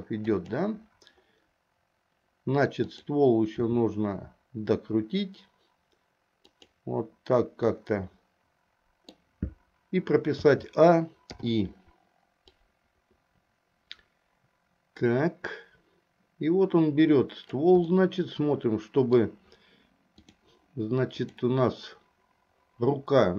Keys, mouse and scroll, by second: 2.9 click, 3.8 r, 7.7-9.3 middle drag, 10.5 a, 11.4 i, 12.7-17.7 drag, 18.0-19.4 middle drag, 20.3 click, 21.2 click.